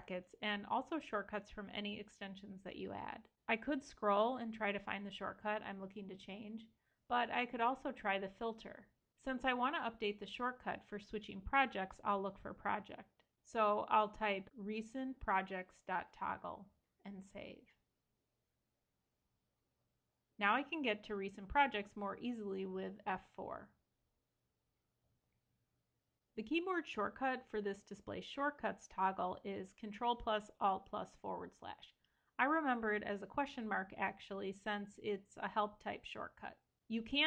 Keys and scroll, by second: 19.5 super+s, 22.6 F4, 24.6 Escape.